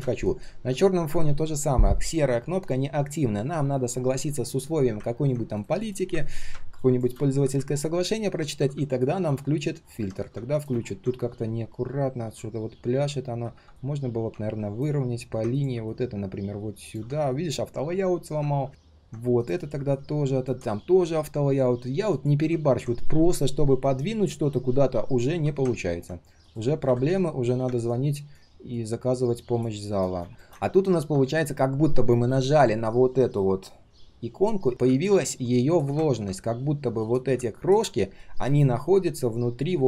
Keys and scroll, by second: 18.6 ctrl+z.